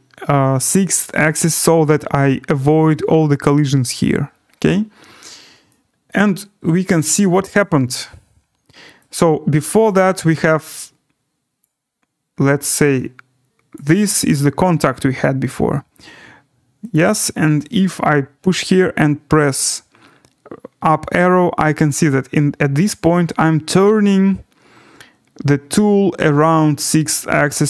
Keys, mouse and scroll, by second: 5.3 scroll, 6.1 right click, 7.6 click, 11.6 click, 11.8-12.6 scroll, 13.7 click, 14.8 right click, 16.9 click, 19.1-27.6 Up, 20.8-21.9 drag.